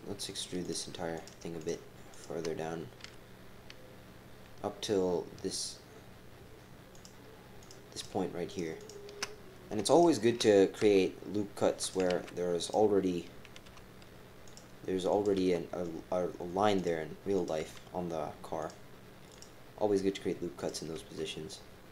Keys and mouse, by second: 0.2 shift+click, 0.6 shift+click, 1.1 shift+click, 1.6 shift+click, 2.2 shift+click, 3.0 e, 7.4-8.2 typing, 7.6 click, 7.9 shift+click, 8.5 shift+click, 8.8 shift+click, 10.8-13.6 typing, 15.3 g, 17.4 click, 17.6 g, 19.3 click, 20.6 click, 20.9 g.